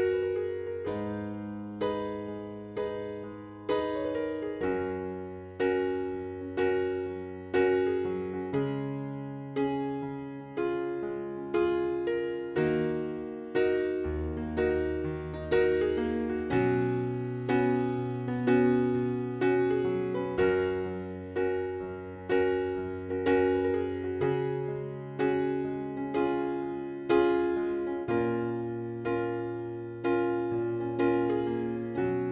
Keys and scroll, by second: 6.7 c, 10.8-11.9 typing.